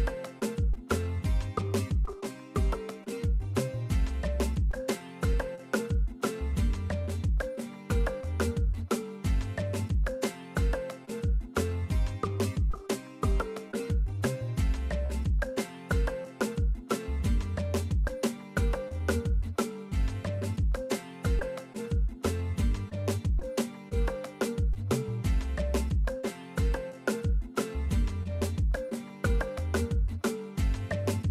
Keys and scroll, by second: 2.7 e, 8.0 alt+l, 13.0 ctrl+a, 20.6 ctrl+a, 22.0 super+Return, 24.4 super+Return, 30.3 super+Return.